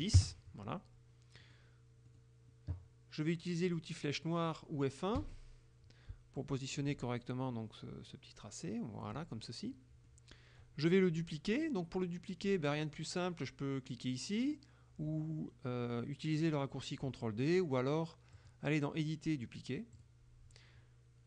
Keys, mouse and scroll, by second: 0.0 KP_0, 0.3 KP_Enter, 1.5 middle click, 2.2 middle click, 2.2 click, 5.3 F1, 6.5 click, 10.2 middle click, 18.5 click, 20.0 click.